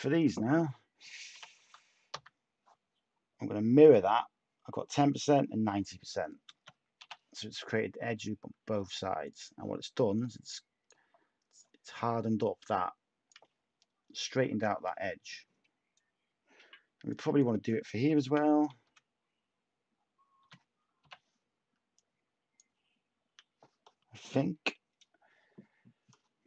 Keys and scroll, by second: 1.3-2.6 typing, 7.0 /, 8.5 Tab, 18.2-18.8 typing, 20.4 space, 25.5 /.